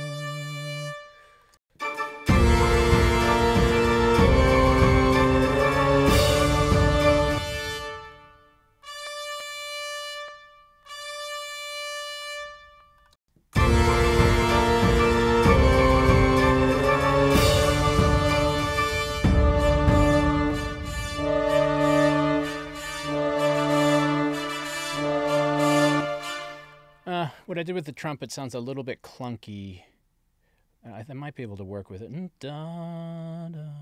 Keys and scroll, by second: 1.5 space, 7.2 space, 13.1 space, 25.8 space.